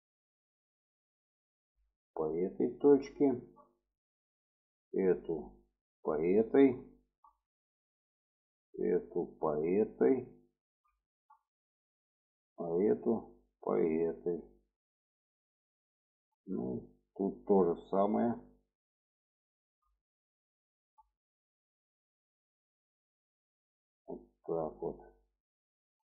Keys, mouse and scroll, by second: 0.7-2.6 drag, 3.0 shift+middle click, 4.1 click, 4.9-6.4 ctrl+drag, 6.7 shift+middle click, 7.7 click, 8.6-10.5 ctrl+drag, 10.8 shift+middle drag, 11.7 shift+middle drag, 13.3-14.9 ctrl+drag, 15.2 shift+middle click, 15.8 shift+middle click, 16.8 click, 17.8-19.4 ctrl+drag, 19.8 shift+middle click, 20.4 shift+middle click, 21.5 click, 22.3-24.6 ctrl+drag, 25.1 shift+middle click.